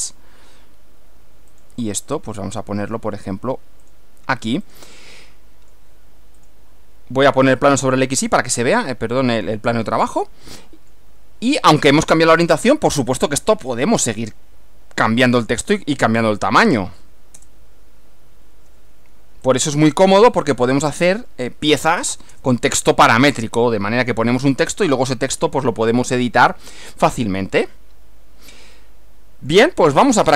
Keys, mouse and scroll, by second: 0.0 click, 1.6 click, 3.9 click, 4.8 click, 5.2 middle click, 6.4 click, 7.5 click, 8.5-9.9 middle drag, 10.5 middle click, 13.0 click, 15.4 click, 16.5 a, 17.4 Return, 19.5 click, 20.5 click, 22.2 BackSpace, 23.4 Return, 26.9-29.8 middle drag.